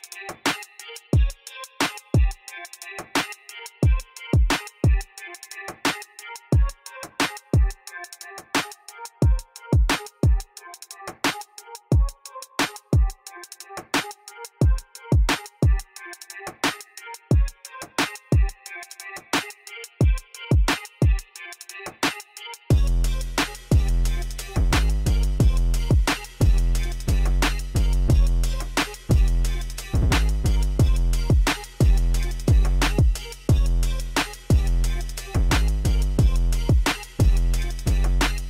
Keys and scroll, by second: 14.5 b, 15.2 g, 15.9 Return, 23.2 7, 26.9 shift+s, 31.7 shift+d, 31.9 r, 34.3 shift+r, 38.1 r.